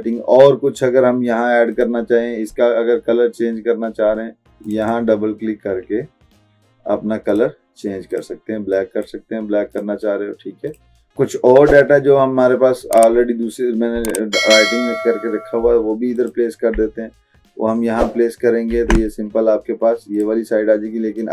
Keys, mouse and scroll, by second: 1.9 click, 4.1 click, 4.5 click, 7.3 click, 16.2 click, 18.8 ctrl+v, 20.2-21.3 drag.